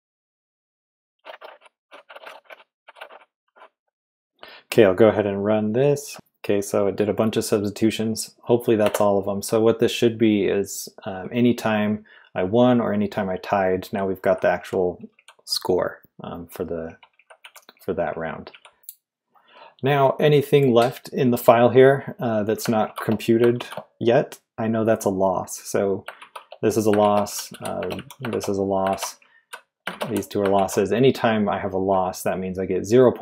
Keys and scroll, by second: 0.9-4.0 typing, 6.1 Return, 8.8 Return, 13.6-15.1 typing, 16.8-19.2 typing, 22.8 shift+v, 23.5 shift+v, 26.2-30.5 typing.